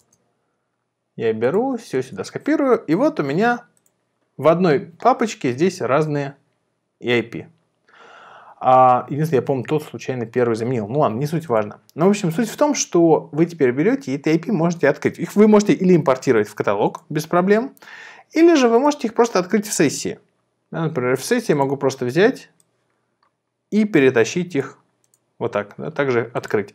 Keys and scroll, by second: 1.9 super+v.